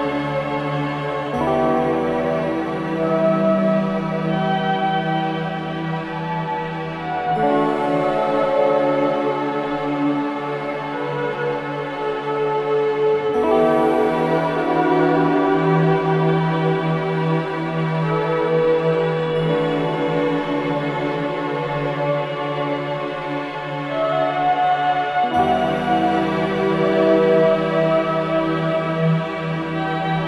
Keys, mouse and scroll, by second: 3.8-4.3 scroll down 1, 5.6 click, 6.0-6.5 scroll up 1, 7.0-13.9 ctrl+shift+drag, 13.9 click, 17.0-17.5 scroll down 1, 18.3 click, 20.2-20.6 scroll up 1, 21.5-25.4 drag, 25.4-26.0 scroll down 1, 27.1-27.7 scroll up 1.